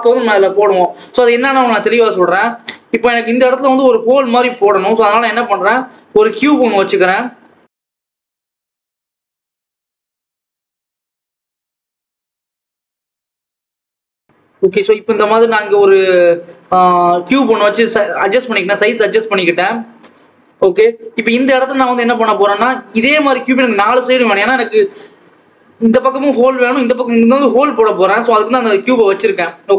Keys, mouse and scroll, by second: 2.0 shift+a, 3.1-3.5 scroll up 2, 3.5-4.7 scroll down 1, 4.7 shift+a, 6.6 KP_7, 7.4 Tab, 7.8 Tab, 8.0 g, 8.6 Tab, 8.7 s, 9.4 Tab, 9.5 g, 10.2 click, 10.8 g, 11.4 KP_7, 11.7 scroll down 1, 11.8 Tab, 12.0 s, 12.9 s, 13.6 Tab, 13.9 click, 14.2-14.8 scroll up 2, 14.8 Tab, 15.0 s, 16.5 ctrl+s, 16.8 Tab, 17.3 scroll down 1, 17.5-18.3 scroll up 1, 18.3 click, 20.7-21.9 scroll down 2, 20.9 ctrl+s, 21.9 click, 22.5-25.6 scroll up 1, 28.6 click.